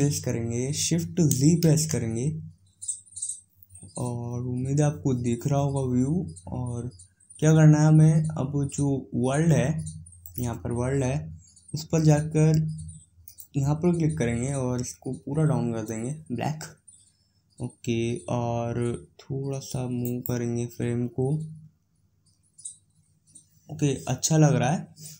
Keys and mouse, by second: 1.6 shift+z, 11.9-21.2 drag, 21.2-25.1 right drag.